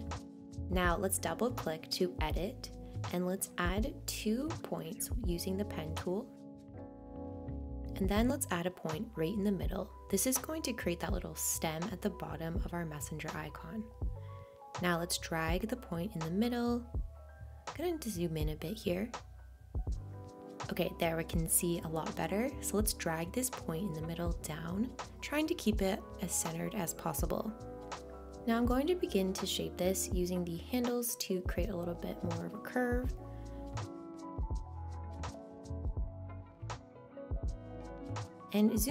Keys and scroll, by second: 17.5 super+z.